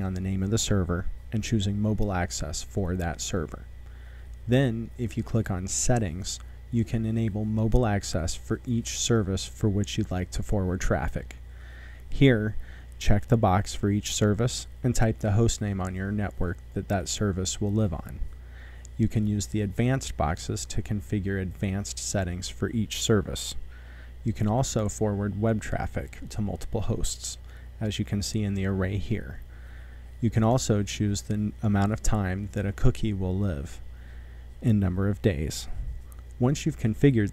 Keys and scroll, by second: 0.0-0.2 typing, 4.2-6.5 typing, 10.6-11.0 typing, 12.1-14.9 typing, 15.6 Up, 16.2 c, 16.5 Tab, 17.2 v, 23.3-25.2 typing.